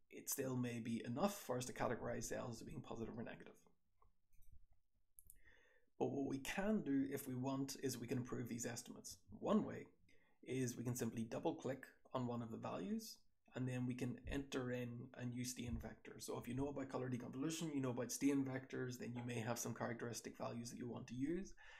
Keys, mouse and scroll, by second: 1.3-2.6 scroll up 1, 2.6-3.9 scroll up 1, 4.2 click, 4.3-5.2 scroll up 2, 4.4 3, 5.2 scroll up 1, 5.2 3, 10.6-11.9 scroll up 2, 10.8 click, 10.9 click.